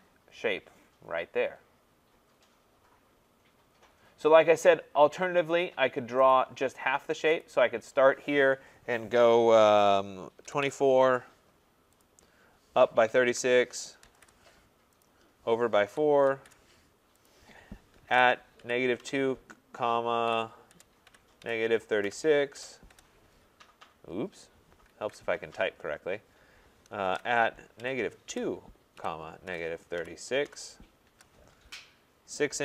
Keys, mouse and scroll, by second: 3.6 scroll down 2, 4.5 scroll down 4, 5.1 scroll up 2, 5.3-6.3 scroll, 6.3 click, 7.5 click, 10.2-14.6 typing, 12.1 click, 15.0 click, 15.6-16.4 typing, 17.3 click, 17.8-22.9 typing, 22.6 click, 25.0 ctrl+z, 26.8-28.3 typing, 29.5-31.1 typing, 32.5-32.6 typing.